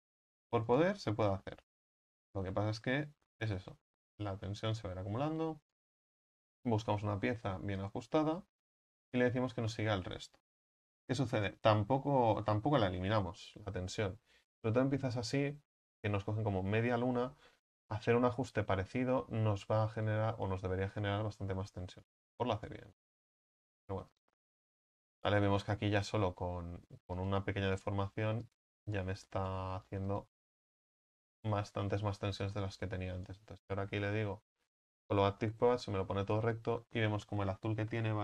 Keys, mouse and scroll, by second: 0.7 right click, 1.8 s, 4.8 click, 5.7-8.0 right drag, 8.0 w, 10.7-11.7 right drag, 11.7 Tab, 12.3 Tab, 17.8-20.1 right drag, 20.1 click, 21.0-24.0 right drag, 24.0 s, 25.2-26.9 right drag, 26.9 s, 27.8-28.3 right drag, 28.3 s, 28.9 right click, 29.9 s, 32.6 click, 33.2-35.0 right drag, 35.0 w.